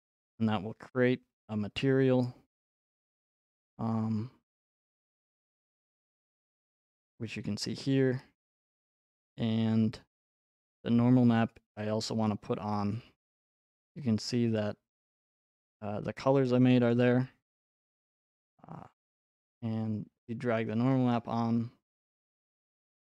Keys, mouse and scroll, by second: 2.7 click, 6.7 click, 7.5 click, 13.5-14.0 scroll, 14.0 scroll, 15.5 scroll, 16.9 click, 20.9 click.